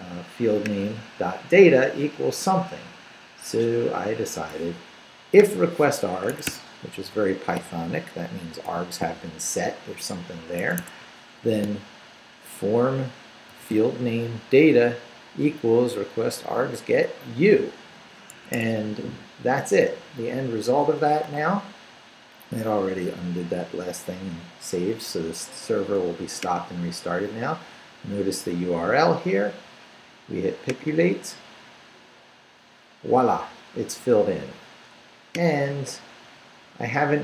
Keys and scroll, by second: 6.3 Escape, 6.8 Up, 7.6 shift+Up, 8.7 shift+v, 10.6 Escape, 11.0 Down, 11.6 shift+Down, 13.5 shift+v, 18.5 Escape.